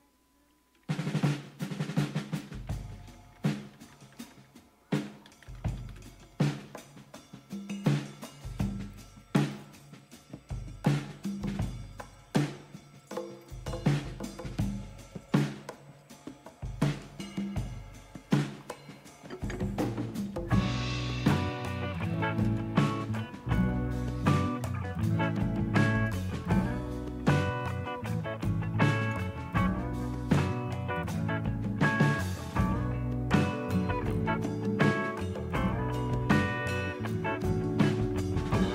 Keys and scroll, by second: 1.9 BackSpace, 2.1 BackSpace, 2.3 BackSpace, 2.5-3.7 BackSpace, 4.9-6.5 typing, 20.3 Up, 22.5 Return, 24.3 Return.